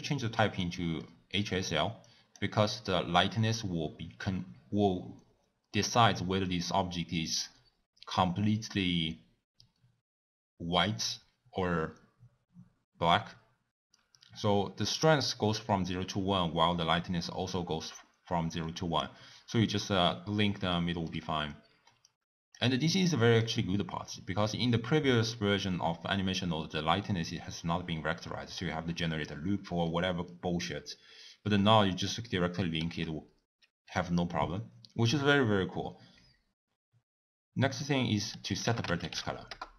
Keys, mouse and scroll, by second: 15.3 click.